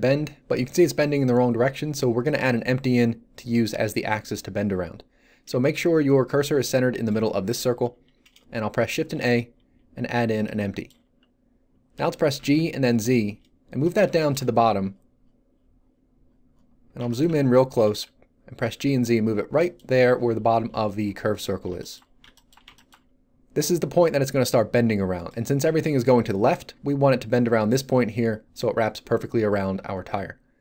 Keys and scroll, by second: 8.9 shift+a, 11.9 g, 12.3 z, 17.2 z, 17.7 g, 17.8 z.